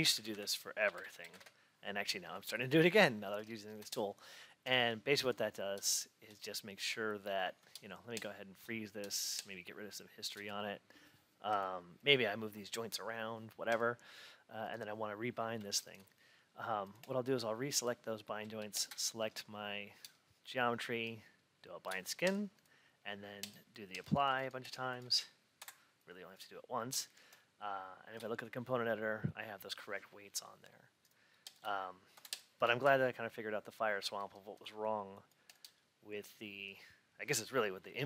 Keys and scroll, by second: 3.2 Return, 25.5 F8, 32.0 F8.